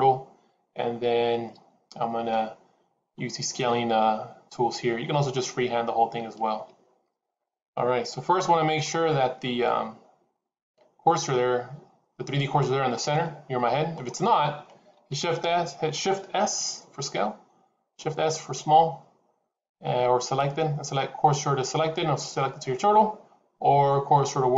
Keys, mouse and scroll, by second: 13.0 middle click, 15.0 shift+s.